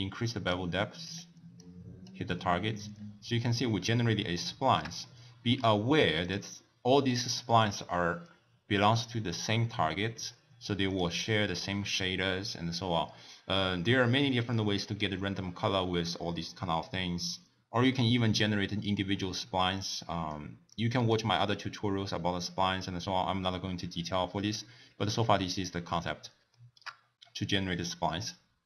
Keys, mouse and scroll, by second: 1.5 click, 2.5-2.9 scroll down 2, 2.9-3.5 scroll up 4, 3.7 scroll up 3, 3.9-6.2 middle drag, 3.9-4.4 scroll down 1, 6.2 click, 10.9 click, 18.0 middle click, 18.6-19.0 scroll down 2, 19.2-19.7 middle drag, 19.7 drag, 20.7 click, 21.7 click, 24.1-25.8 middle drag, 25.8-26.2 scroll down 2, 26.5 shift+middle click, 27.0 scroll down 1.